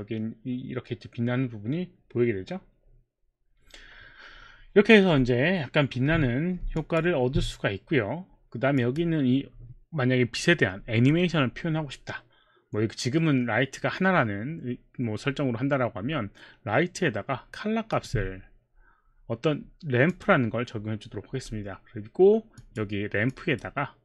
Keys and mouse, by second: 6.8 alt+click, 8.8 click, 17.9 click, 20.1 click, 22.5 click, 23.3 click.